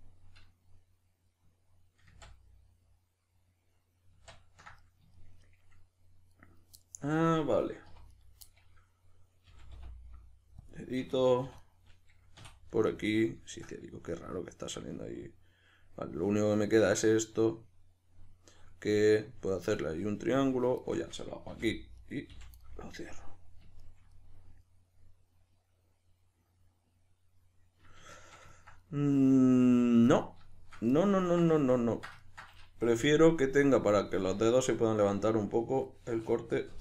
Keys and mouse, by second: 2.1 ctrl+z, 6.3 right click, 6.8-7.9 middle drag, 7.9 3, 8.1 middle click, 8.1 right click, 8.5-11.5 middle drag, 9.5 g, 11.5 2, 11.6 right click, 12.4 f, 12.7-16.4 middle drag, 16.4 right click, 16.9-20.8 middle drag, 20.8 shift+right drag, 21.5 f, 22.0 right click, 22.3 f, 22.6-36.8 middle drag, 32.9 k.